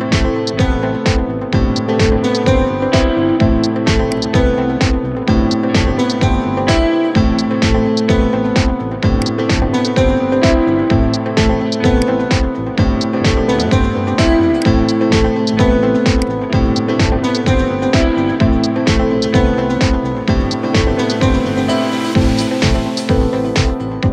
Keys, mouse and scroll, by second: 0.6 KP_1, 1.2-1.6 scroll down 2, 2.3 g, 4.2-5.3 scroll up 2, 5.3 KP_7, 6.2 shift+scroll up 1, 6.3-6.9 shift+middle drag, 6.9-7.2 scroll up 2, 7.8 g, 12.1 scroll up 3, 12.7-13.7 shift+middle drag, 13.7 g, 16.0-17.8 drag, 17.8 scroll down 3, 19.2 t, 20.0-24.1 middle drag.